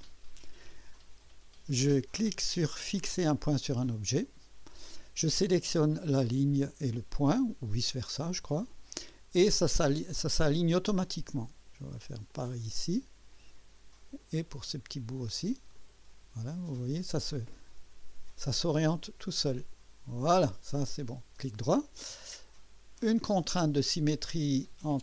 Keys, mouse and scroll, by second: 3.3 click, 6.1 click, 8.5 click, 10.3 click, 12.3 click, 14.2 click, 15.7 click, 17.9 click, 19.6 click, 21.0 right click, 23.2 click.